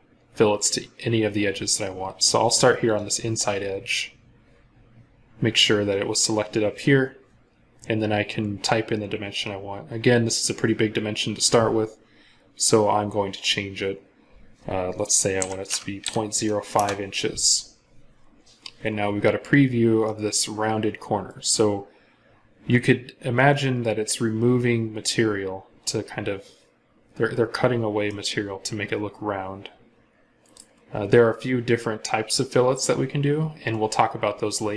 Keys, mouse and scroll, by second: 1.6-2.4 scroll down 1, 15.2-15.8 typing, 16.6 Return, 19.4 scroll down 1, 19.9 middle click, 21.6-22.9 scroll down 1, 27.9 middle click.